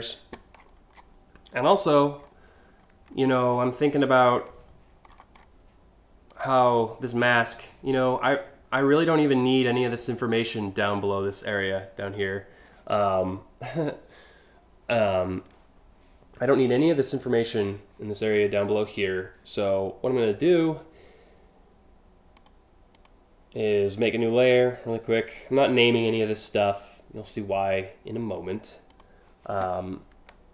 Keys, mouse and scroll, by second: 0.2 3, 0.6 3, 1.8 4, 4.6 1, 4.9 scroll up 1, 5.9 click, 22.0 click, 22.6 click, 23.9 click, 28.5 click.